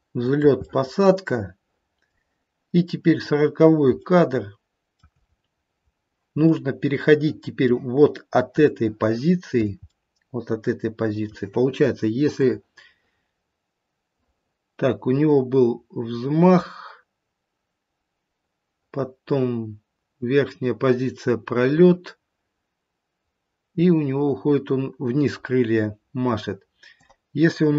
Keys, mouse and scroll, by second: 0.3 shift+middle click, 0.7 middle click, 1.7 middle click, 2.6 middle click, 3.2 click, 4.1 shift+middle click, 5.2-5.8 scroll up 1, 5.8 scroll down 2, 6.5 middle click, 6.7 middle click, 7.4 middle click, 8.7 shift+middle click, 9.5 shift+middle click, 9.8 middle click, 10.4 middle click, 12.3 click.